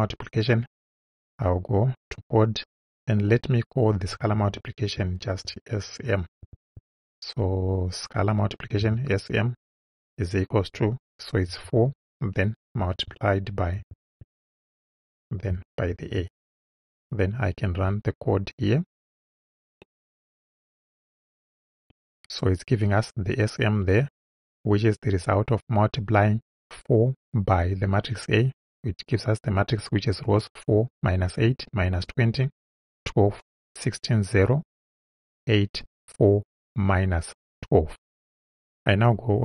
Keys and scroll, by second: 5.5 shift+s, 6.4 shift+m, 8.9 =, 11.5 4, 13.8 shift+8, 15.9 shift+a.